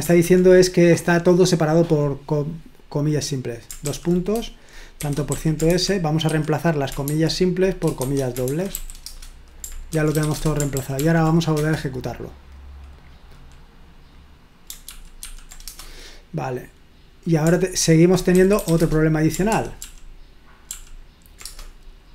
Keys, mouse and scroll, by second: 4.8-7.1 typing, 8.2-10.7 typing, 11.0 ctrl+p, 11.6 Return, 14.8 ctrl+p, 15.2 ctrl+p, 15.7 Return, 18.4-19.2 typing, 19.5 ctrl+p, 19.8 ctrl+p, 20.7 ctrl+p, 21.5 Return.